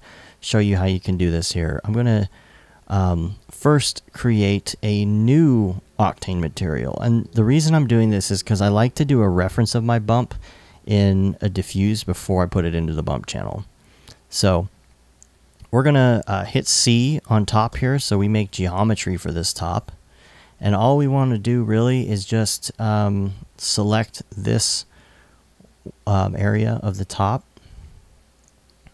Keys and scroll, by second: 17.3 c, 21.3 alt+i.